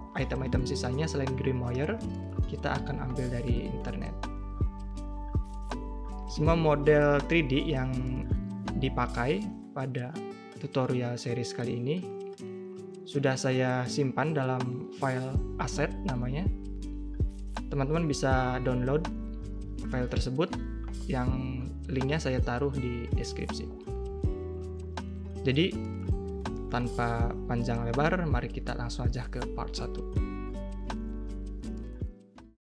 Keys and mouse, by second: 0.3 middle click, 0.6 middle click, 1.0 middle drag, 1.3 middle click, 1.6 middle click, 2.1 middle click, 3.2 middle click, 3.8 a, 3.9 a, 3.9 middle click, 4.1 2, 4.3 shift+middle click, 4.5 middle click, 4.7 middle drag, 5.2 shift+drag, 5.6 middle click, 6.1 middle click, 6.3 shift+click, 6.6 click, 6.9 a, 7.0 a, 7.1 click, 7.7 shift+click, 8.3 click, 9.0 shift+click, 9.3 shift+click, 9.6-11.3 drag, 11.4 click, 11.9 middle click, 12.7 Tab, 12.8 a, 12.8 a, 12.9 middle click, 13.1 shift+middle click, 13.6 click, 13.7 middle drag, 14.0 right drag, 14.3 middle drag, 14.6 click, 15.2 click, 15.8 click, 16.0 click, 16.1 middle drag, 16.5 middle drag, 16.7 middle drag, 17.0 middle click, 17.1 a, 17.2 a, 17.2 middle drag, 17.5 drag, 17.7 click, 17.8 middle click, 17.9 a, 18.0 a, 18.0 click, 18.7 click, 19.2 shift+click, 19.3 middle click, 19.7 ctrl+shift+[, 19.7 a, 20.0 click, 20.2 click, 20.3 middle click, 20.4 drag, 20.8 drag, 21.1 middle click, 21.6 middle click, 21.9 middle click, 22.7 Tab, 22.9 a, 22.9 a, 22.9 middle click, 23.8 click, 24.0 middle click, 24.1 shift+middle click, 24.5 middle click, 24.6 shift+middle click, 24.9 x, 26.1 k, 26.5 middle drag, 26.8 ctrl+r, 27.1 click, 27.4 k, 28.0-29.5 drag, 29.5 click, 30.0 k, 30.2 click, 30.7 click, 31.0 a, 31.0 a, 31.1 click, 31.3 2, 31.8 click.